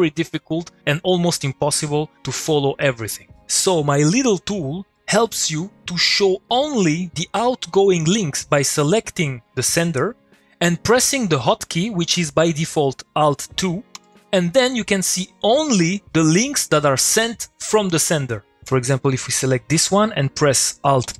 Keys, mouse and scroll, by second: 6.5 click, 8.7 click, 13.8 click, 19.1 click, 20.8 click.